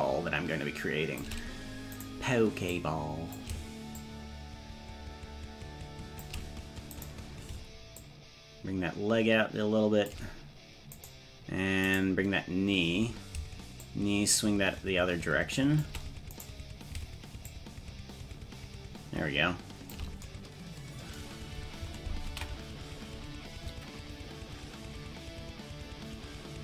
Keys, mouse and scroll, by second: 2.1 right click, 2.7 click, 4.0-6.3 shift+drag, 7.0 right click, 8.0-10.2 shift+drag, 11.1-13.0 right drag, 13.9-16.0 shift+drag, 16.4 right click, 17.5-20.0 shift+drag, 22.5 ctrl+s.